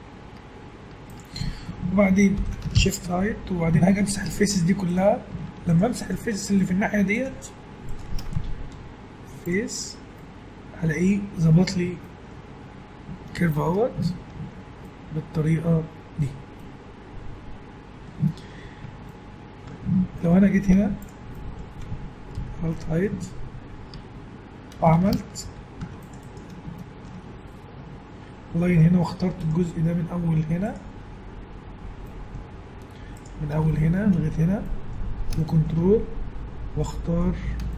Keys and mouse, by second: 2.4 ctrl+l, 2.8 shift+h, 3.9-5.6 middle drag, 5.6 click, 5.9-7.1 right drag, 8.9 x, 11.6 Tab, 20.7 Tab, 22.4 alt+h, 23.9 a, 25.4 ctrl+r, 27.6-29.4 middle drag, 29.4-32.0 right drag, 32.0 middle click, 32.9-34.9 middle drag, 35.4-36.9 middle drag.